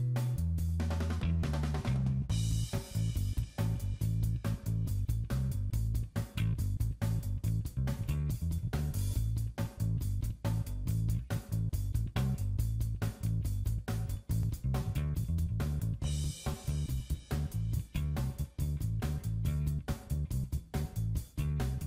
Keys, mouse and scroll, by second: 0.1 click, 0.7 middle click, 2.3 click, 3.2 click, 6.3 click, 8.8 shift+click, 13.3 middle click, 14.1 scroll up 3, 14.6 middle click, 16.6 click, 18.5 shift+middle click, 19.4 middle click, 20.8 click.